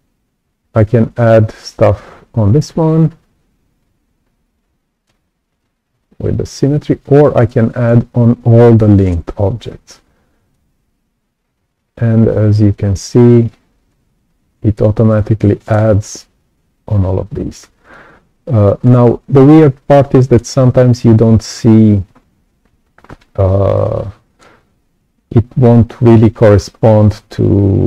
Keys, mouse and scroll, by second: 6.1 ctrl+z, 10.5-13.2 alt+drag, 13.8-15.7 right drag, 13.9-15.7 drag, 17.8-18.8 right drag, 17.9 click, 19.0-19.3 scroll down 2, 19.4 right click, 19.5 click, 20.5-20.9 scroll up 2, 23.6 right click, 23.7 click.